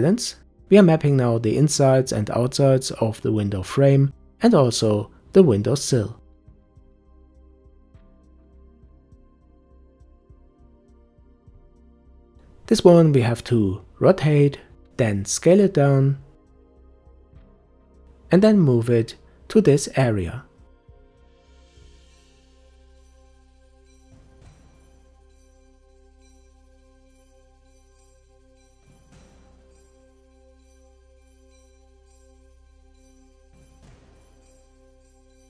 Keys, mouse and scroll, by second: 0.7 a, 0.9 s, 1.5 g, 3.3 s, 4.1 g, 6.0 s, 6.4 Tab, 6.7-8.1 middle drag, 8.7 scroll up 2, 8.9 Tab, 9.2 click, 9.8 shift+click, 11.4 u, 12.9-13.7 scroll down 1, 13.7 a, 15.2 r, 19.2 s, 20.7 g, 23.3 s, 24.9-26.1 shift+middle drag, 26.1 scroll up 2, 26.4 s, 27.0 g, 27.5 Tab, 28.0 scroll down 4, 28.3 middle click, 28.5 scroll up 2, 28.6 shift+middle click, 29.5 scroll up 1, 29.7 click, 30.6 middle click, 30.8 click, 30.9 scroll down 2, 31.1 middle click, 31.3-31.8 scroll up 2, 31.6 middle click, 32.1 shift+click, 32.4 shift+click, 33.0-35.2 typing, 33.4 scroll down 4, 33.5 scroll up 2.